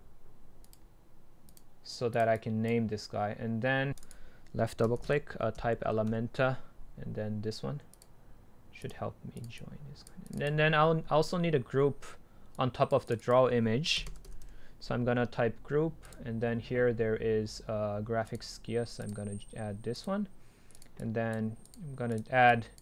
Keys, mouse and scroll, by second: 0.9-6.1 drag, 6.1 Delete, 8.1-12.5 drag, 12.6-13.3 scroll down 2, 13.3-15.4 drag, 16.2-21.7 drag.